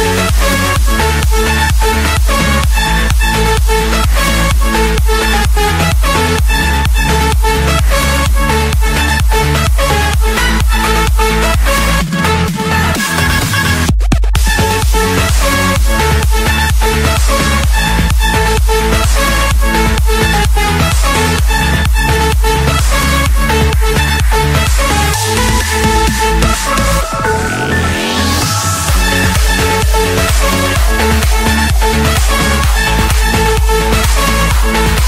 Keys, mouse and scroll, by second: 0.0-0.5 typing, 1.1 Return, 2.1 click, 2.6 Return, 3.5 click, 3.8 Return, 4.6 Escape, 5.8 click, 6.9 click, 13.0 click, 13.4-13.9 scroll, 17.8 click, 19.8 click, 20.1-20.7 scroll down 9, 21.0-21.6 scroll up 2, 22.3-23.6 drag, 27.1 click, 27.3 Escape, 28.4 click, 28.9 Escape, 29.7 click, 30.5 Escape, 30.5 click, 32.2-33.4 drag, 34.1 click, 34.3 Escape.